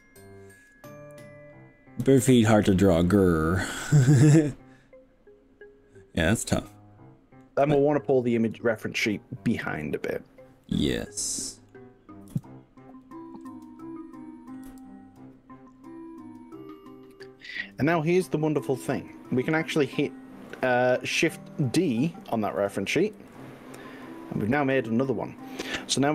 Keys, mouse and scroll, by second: 2.1 click, 4.0 scroll up 1, 4.0-7.5 middle drag, 7.7-8.1 scroll down 2, 10.6-11.7 middle drag, 12.3 g, 13.5 x, 14.7 y, 19.5 click, 23.2 shift+d.